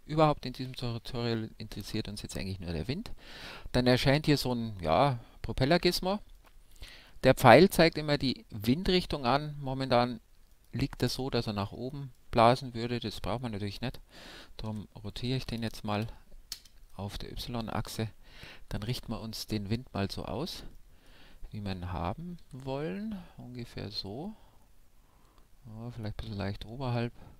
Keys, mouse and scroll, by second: 4.3 a, 6.3-8.2 right drag, 7.4 a, 10.4-12.1 right drag, 11.1-15.4 middle drag, 14.7 r, 17.3-19.2 middle drag, 18.9 KP_1, 19.4 KP_5, 20.2-22.4 middle drag, 22.4 g.